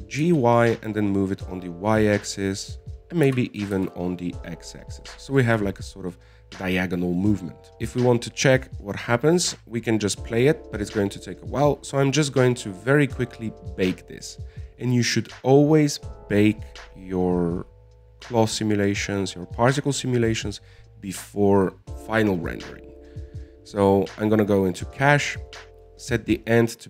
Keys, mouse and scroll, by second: 1.0 g, 4.6 g, 7.2 scroll down 1, 7.4 middle click, 7.8 click, 8.4-8.7 scroll up 1, 8.7 right click, 9.2-10.2 scroll up 1, 10.2 click, 12.0-15.9 scroll down 21, 25.7-26.8 drag.